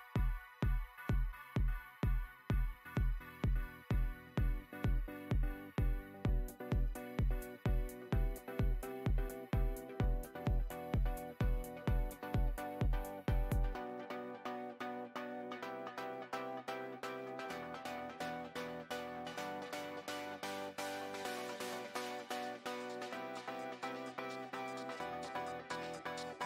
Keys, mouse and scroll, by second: 0.2 KP_Decimal, 0.4 scroll down 1, 0.6-1.5 middle drag, 1.5 shift+a, 2.1 alt+middle click, 3.0 click, 3.1-3.5 scroll up 11, 3.5-4.4 shift+middle drag, 4.4 g, 5.5 click, 5.8 alt+middle click, 5.9 alt+middle click, 6.1 alt+middle click, 6.3 alt+middle click, 6.5-7.0 scroll up 4, 7.0 g, 7.7 scroll down 3, 7.8 shift+middle click, 8.1 scroll up 1, 8.7-9.1 shift+middle drag, 9.1 s, 10.4 click, 11.0 click, 11.8-12.4 scroll down 2, 12.4-12.8 shift+middle drag, 13.0-15.2 middle drag, 15.2 click, 16.2 scroll up 3, 16.5-18.4 shift+middle drag, 18.4-21.1 shift+drag, 19.9-21.1 middle drag, 21.8 BackSpace, 22.8 Tab, 23.7-25.9 typing.